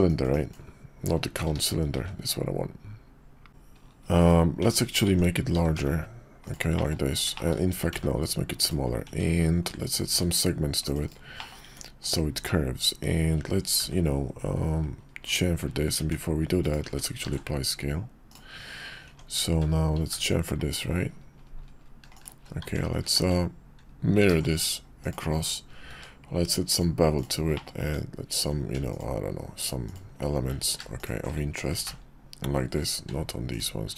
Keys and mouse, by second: 0.3 click, 1.9 shift+a, 3.5 Tab, 3.5 ctrl+r, 3.5 s, 4.6 Tab, 5.1 Tab, 5.5 s, 6.7 click, 7.3 shift+click, 7.7 s, 9.1 Tab, 10.1 ctrl+r, 11.4 click, 11.6 Tab, 13.7 ctrl+b, 16.8 Tab, 17.2 ctrl+a, 19.1 Tab, 19.9 ctrl+b, 22.6 Tab, 23.2 x, 24.3 alt+x, 25.0 click, 25.9 q, 27.5 click, 27.8 Tab, 28.9 alt+shift+click, 29.8 alt+shift+click, 30.6 ctrl+z, 31.0 alt+shift+click, 31.7 ctrl+b.